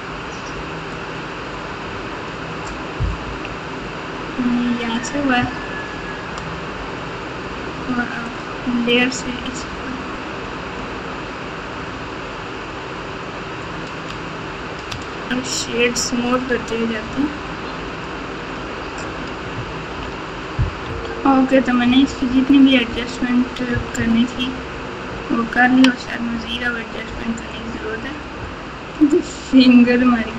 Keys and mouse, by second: 0.9-2.2 drag, 3.2 KP_1, 10.8-13.9 drag, 15.0-16.2 shift+drag, 18.0 click, 19.9 ctrl+z, 20.9 Tab, 21.8-23.9 typing, 25.0-25.8 KP_6, 27.0 KP_2.